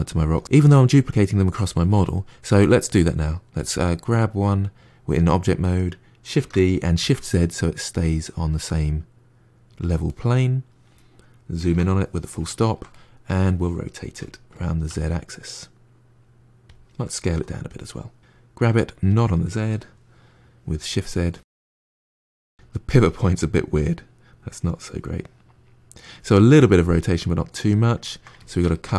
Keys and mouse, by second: 2.4-5.4 drag, 6.3 shift+d, 10.0-11.6 middle drag, 11.6 KP_Decimal, 12.4-14.0 ctrl+middle drag, 14.0 r, 17.2 s, 18.7 g, 21.4 middle click, 21.5 g, 22.0 r, 22.5 g, 23.2-26.2 middle drag, 26.4-28.9 middle drag.